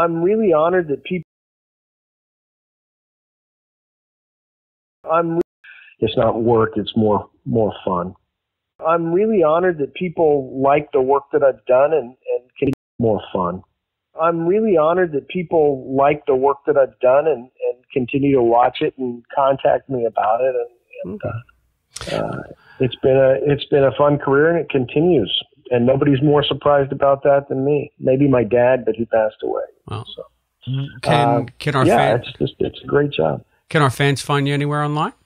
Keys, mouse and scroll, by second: 0.2-3.9 drag, 1.1 space, 4.5 ctrl+shift+Delete, 4.9 space, 5.3 space, 5.4 click, 6.1 click, 6.7 click, 9.5 click, 10.3 click, 11.2-12.3 drag, 12.6 space, 12.8 click, 12.9 space, 16.3 click, 22.1-23.3 drag, 25.0 click, 31.2 click, 34.0 click.